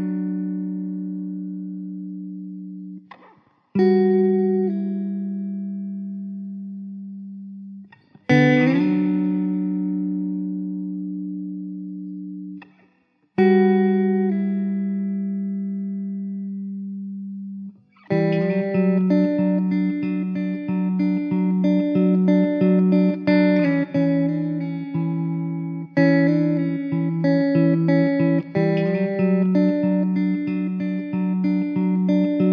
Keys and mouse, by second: 1.3 middle click, 3.0 alt+middle click, 5.0 middle click, 12.1 middle click, 13.6 middle click, 17.0 middle click, 23.4 middle click.